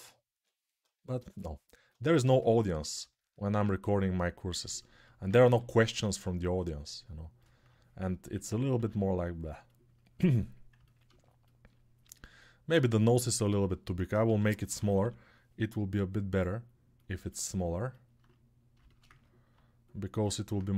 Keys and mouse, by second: 0.1 [, 0.2 [, 5.0-10.9 drag, 6.4 g, 8.6 ctrl+r, 13.0 alt+q, 14.0 g, 14.4 ], 14.6 ], 14.7-20.7 drag, 14.7 ].